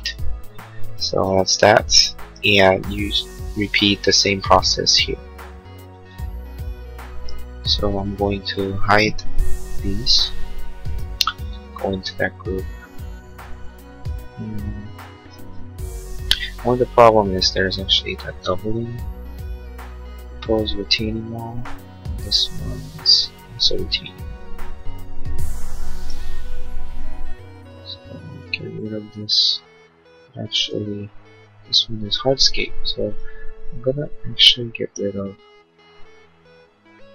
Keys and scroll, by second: 0.1 space, 2.8 ctrl+z, 9.3 h.